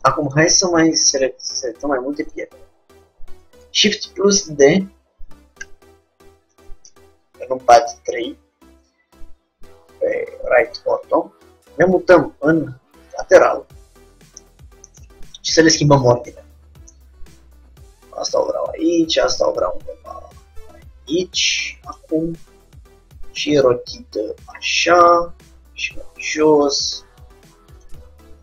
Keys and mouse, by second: 3.8 shift+d, 6.9 KP_3, 10.8-12.5 drag, 14.4-17.5 middle drag, 16.0-17.6 drag, 17.7 g, 19.3-20.9 drag, 19.5 g, 22.6 r, 25.3 g, 27.8-28.4 drag.